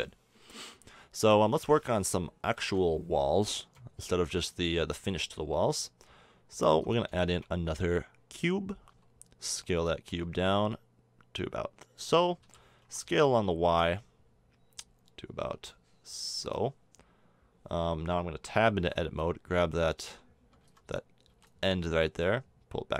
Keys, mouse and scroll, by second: 1.2 KP_7, 7.2 shift+a, 8.9 s, 10.1 s, 12.4 s, 17.7 Tab, 18.8 b, 20.0 a, 20.6 b, 21.3 b.